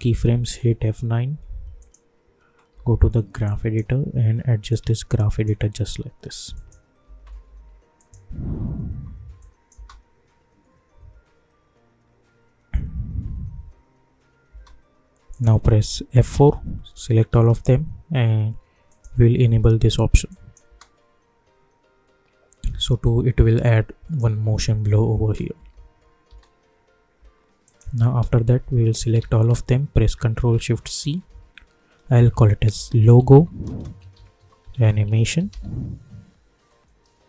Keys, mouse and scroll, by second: 0.3 F10, 0.6 F9, 1.8 click, 2.7 =, 2.8 =, 3.4-6.5 drag, 7.0-9.7 typing, 7.9 click, 9.4 click, 14.5 space, 15.3 click, 16.2 F4, 17.2 ctrl+a, 18.8 click, 20.6 space, 25.3 space, 27.6 click, 29.1 ctrl+a, 30.9 ctrl+shift+c, 32.5-35.9 typing.